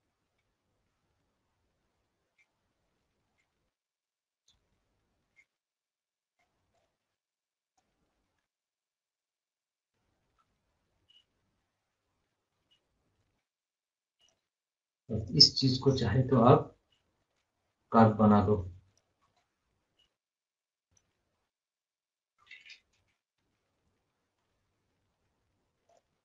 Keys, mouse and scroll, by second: 1.0 scroll, 1.2 scroll down 1, 1.6 scroll up 1, 1.8 scroll down 1, 3.8 shift+click, 8.1 scroll up 1, 8.3-8.6 scroll down 1, 8.9 scroll up 1, 9.3-9.9 scroll down 1, 10.5 scroll up 1, 10.8 scroll down 1, 13.7 right click, 14.2 click, 18.2 scroll up 1, 18.9 click, 19.2 scroll up 1, 19.6 scroll down 1, 20.1 scroll up 1, 20.6 scroll down 1, 21.2 scroll up 1, 21.9 scroll down 1, 23.0 m, 25.9 click.